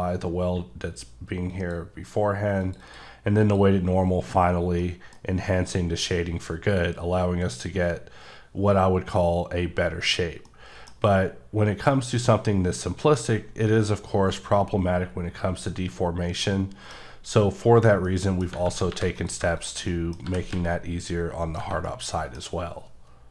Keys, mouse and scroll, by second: 1.5 click, 2.6 click, 2.8 double click, 3.4 click, 4.0-4.6 scroll down 6, 4.8 middle click, 6.7-8.0 scroll down 2, 10.5 middle click, 10.7 scroll down 1, 15.8 scroll down 2, 16.4 middle click, 17.7-18.1 scroll down 1, 18.1 middle click, 18.4 scroll down 1, 18.9 3, 19.2 click, 19.9 middle click, 20.3 g, 20.5 z, 21.4 click, 21.9 middle click, 22.4-22.8 scroll up 3.